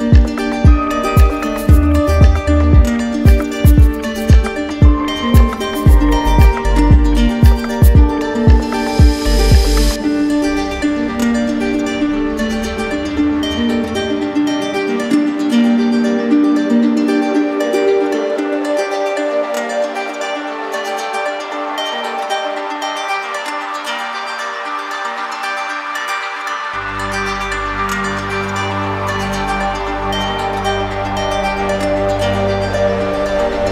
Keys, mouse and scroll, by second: 2.4 click, 3.5 right click, 4.3 alt+right click, 5.4 alt+right click, 6.6 alt+right click, 9.8 click, 11.8 click, 12.8 alt+click, 14.2 right click, 16.4 click, 18.2 alt+right click, 19.0 q, 19.8 click, 22.3 click, 24.3 click, 25.1 click, 26.3 click, 27.8 click, 28.1 ctrl+d, 31.0 ctrl+d.